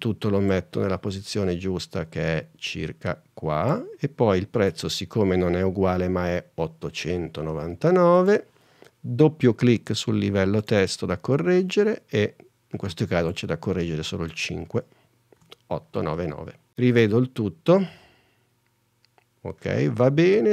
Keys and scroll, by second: 4.8 super+Tab, 15.5 8, 17.1 space.